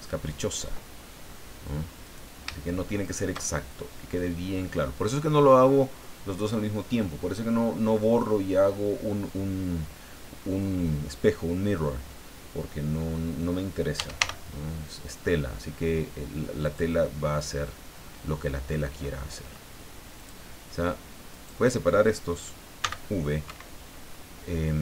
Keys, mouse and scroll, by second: 1.0-1.3 scroll up 1, 2.0 right click, 3.0 shift+right click, 3.8 scroll down 2, 4.2-5.3 middle drag, 13.7-14.7 typing, 16.6 click, 17.0-18.9 middle drag, 20.2 click, 21.3 right click, 22.8 v, 23.5 Escape.